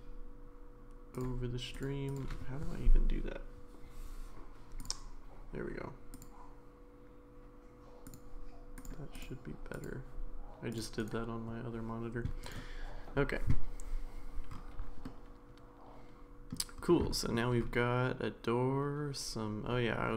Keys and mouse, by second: 12.4 click, 15.0-16.5 middle drag, 17.1 shift+middle drag.